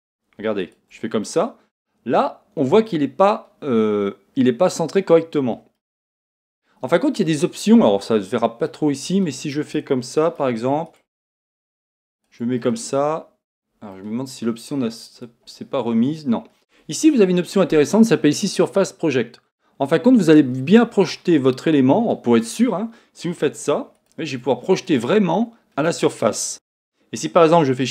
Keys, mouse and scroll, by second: 0.6 shift+right click, 1.3-10.9 middle drag, 10.9 shift+right click, 11.4 shift+right click, 12.1 shift+right click, 12.6-15.1 middle drag, 15.1 click, 20.2 click, 21.1-23.9 middle drag, 23.9 shift+right click, 24.8-27.9 middle drag.